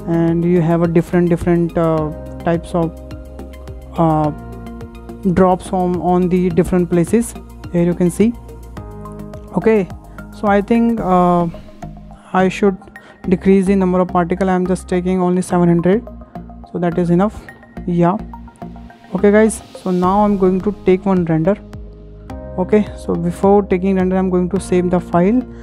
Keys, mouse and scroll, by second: 2.3-2.6 scroll up 3, 3.8-6.2 shift+middle drag, 6.2-6.9 scroll down 4, 6.9-8.1 shift+middle drag, 8.1-8.5 scroll up 3, 8.7-10.8 shift+middle drag, 10.8 scroll down 1, 11.8 drag, 12.9-15.6 drag, 15.0-16.3 typing, 15.9 Return, 17.0 click, 17.6 scroll down 1, 17.7-18.6 middle drag, 18.6-19.0 scroll down 6, 19.3-20.1 middle drag, 20.1 scroll up 3, 20.5 shift+middle click, 20.9 KP_0, 21.2 KP_0, 22.8 ctrl+s, 22.8 ctrl+s, 24.9 click.